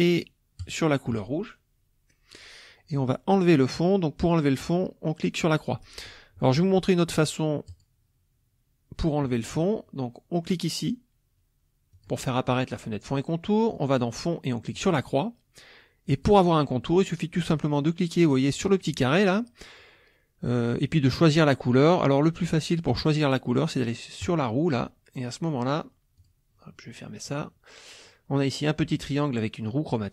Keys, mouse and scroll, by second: 0.6 shift+click, 5.5 click, 7.7 click, 12.0 click, 13.8 click, 14.8 click, 16.1 click, 18.9 click, 24.2 click, 26.2 click.